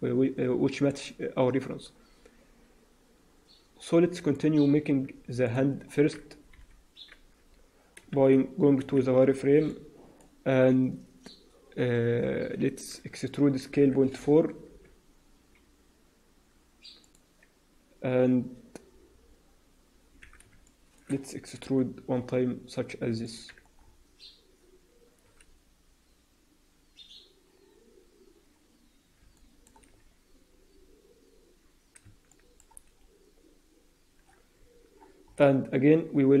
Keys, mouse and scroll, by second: 0.1 scroll down 1, 0.6 shift+middle click, 3.2-3.9 scroll up 6, 4.1 shift+middle click, 4.4-4.9 scroll up 2, 5.3 middle click, 6.5 KP_1, 8.1 shift+z, 8.7 alt+a, 9.4 b, 13.5 e, 20.5 shift+middle click, 21.5 e, 23.5 Tab, 23.7-24.5 scroll down 5, 29.3 shift+middle click, 29.9-30.2 scroll up 1, 32.2 shift+middle click, 32.8-33.3 scroll up 3, 34.1-34.9 scroll up 4, 34.9 Tab, 34.9-35.6 scroll down 9, 35.6-36.4 scroll up 2.